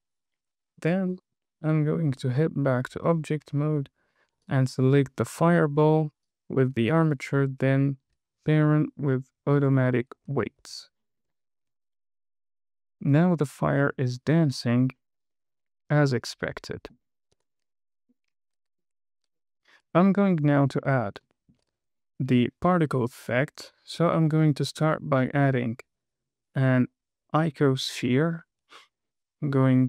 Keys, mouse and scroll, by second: 1.7 Tab, 3.9 scroll down 1, 4.2 middle click, 4.8 click, 5.3-6.0 scroll up 3, 6.6 shift+click, 8.1 super+p, 10.6-10.9 scroll down 2, 10.9 KP_1, 11.3 scroll down 1, 11.6 space, 15.4-15.8 scroll down 2, 15.7 middle click, 17.7 KP_1, 18.7-19.2 scroll up 1, 19.9 space, 20.5 scroll down 2, 20.9 shift+middle click, 21.3 scroll up 1, 21.7 shift+middle click, 24.4 shift+a.